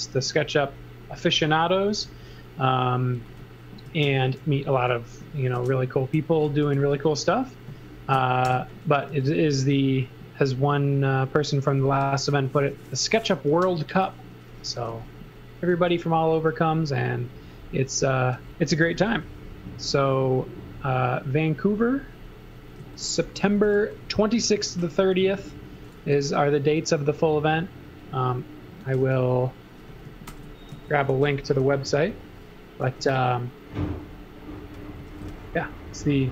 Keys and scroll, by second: 1.9 space, 4.0 super+c, 4.5 e, 5.6 space, 6.3 z, 6.6 space, 8.5 alt+shift+v, 9.1 z, 9.6 b, 14.4-16.4 typing, 18.5-19.5 typing, 22.8-26.6 typing, 28.6-31.8 typing, 32.9 m, 34.7-36.2 typing.